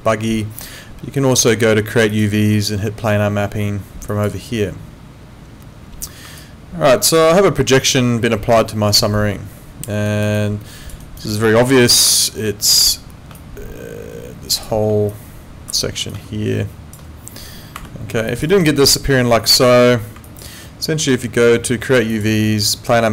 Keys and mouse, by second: 2.1 click, 4.1 click, 6.4 alt+click, 10.1 alt+right click, 10.4 alt+click, 11.0 alt+right click, 11.9 ctrl+2, 17.8 Escape, 18.3 alt+click, 18.5 alt+right click, 19.6 ctrl+z, 20.3 alt+click, 22.1 click.